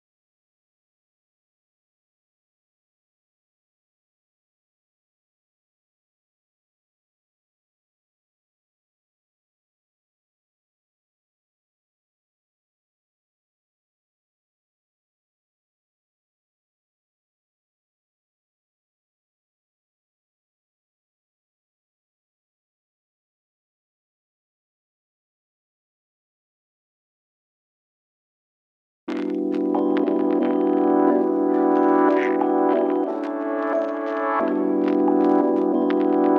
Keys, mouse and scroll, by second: 2.6 click, 5.0-36.3 drag, 35.6 scroll.